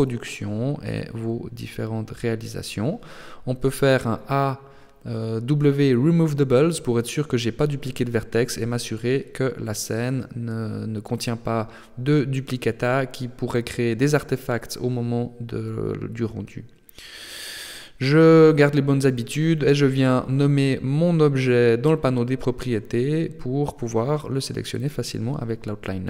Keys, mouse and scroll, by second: 0.5-1.2 shift+scroll down 3, 1.2 Tab, 1.7 a, 1.9 a, 2.8 w, 7.4 Tab, 9.3 click, 10.0-10.6 scroll down 1, 11.1-11.7 scroll down 1, 11.7 shift+middle click, 14.9 click, 15.5 click, 25.8 ctrl+s.